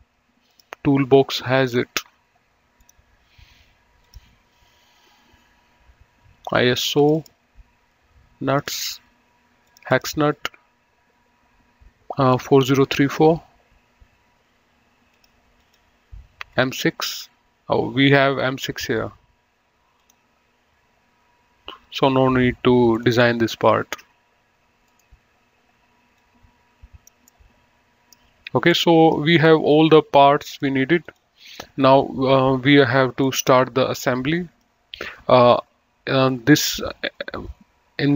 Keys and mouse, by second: 2.0 click, 3.1 click, 4.4 click, 7.3 click, 8.8 click, 12.6 click, 15.4 click, 20.3 click, 23.1 click, 25.2 right click, 26.4 click, 29.0 middle click, 30.6 click, 33.5 middle click.